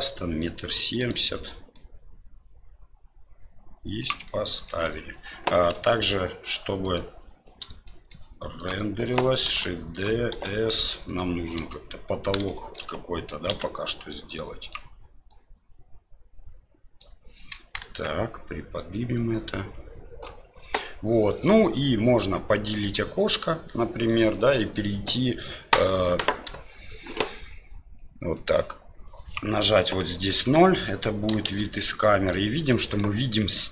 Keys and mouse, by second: 0.9 right click, 1.7-4.0 drag, 4.3-4.7 middle drag, 5.7 KP_7, 8.0 middle click, 8.5 right click, 9.4 shift+d, 10.3 s, 11.5 KP_7, 12.5-12.8 shift+middle drag, 13.5 s, 15.2-17.0 drag, 17.5 KP_1, 17.8 KP_3, 19.0-20.2 drag, 22.9-24.1 drag, 28.3-29.3 drag, 30.3 KP_0, 31.4 shift+z, 32.7 middle drag.